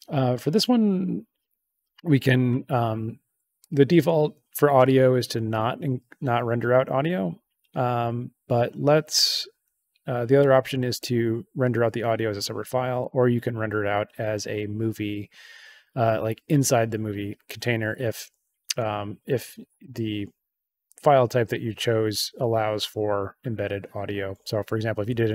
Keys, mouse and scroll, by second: 3.5 click, 10.9 click, 13.0 click.